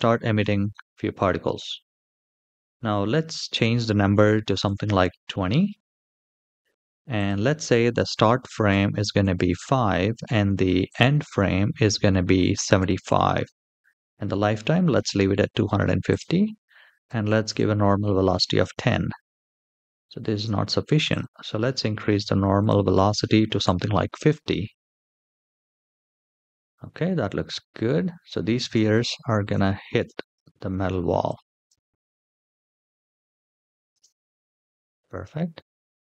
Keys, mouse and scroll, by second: 0.4 space, 1.2 space, 2.1 click, 3.2-4.4 drag, 5.6-6.3 scroll down 1, 6.3-6.9 scroll down 2, 6.9-9.0 drag, 10.6-12.8 drag, 14.8-15.8 scroll down 2, 15.8-17.2 drag, 15.8-16.8 scroll down 1, 18.4 space, 19.2-19.6 middle drag, 20.1 space, 20.8 click, 22.3-23.6 drag, 25.4 space, 26.5-27.2 middle drag, 28.4 space, 29.0 shift+middle drag, 29.7 space, 30.1 space, 31.0 click, 31.4 space, 33.6 space, 34.4 click, 35.5-36.0 scroll down 3.